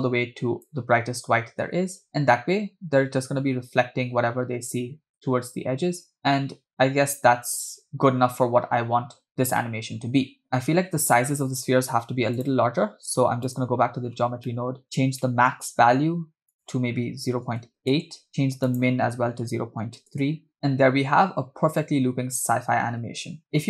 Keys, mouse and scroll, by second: 2.1 space, 3.5 space, 4.0 space, 5.4 space, 6.6 space, 7.9 space, 8.7 space, 9.1 space, 10.5 space, 12.4-13.6 drag, 14.3 scroll down 2, 14.5 middle click, 15.0 scroll up 2, 15.2 middle click, 15.6 scroll up 2, 16.5-20.5 drag, 20.5 space, 23.4 space.